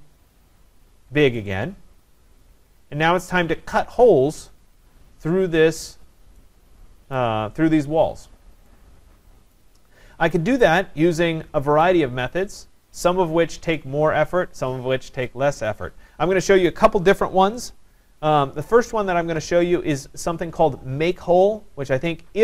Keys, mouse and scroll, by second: 0.2-1.1 scroll, 3.4 right click, 3.9 scroll, 7.2 right click, 9.5 right click.